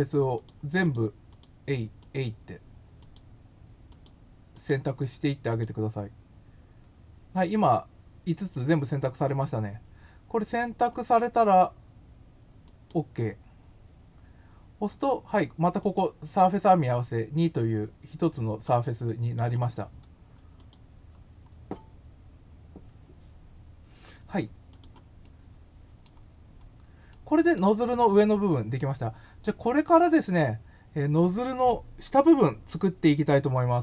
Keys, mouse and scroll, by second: 0.3 click, 0.8 click, 1.2 click, 1.9 click, 2.9 click, 3.8 click, 4.5 click, 5.5 click, 12.6 click, 15.8 click, 18.8 click, 19.1 click, 20.6 click, 24.7 click, 25.2 middle click, 26.4 scroll up 1, 27.1 middle click.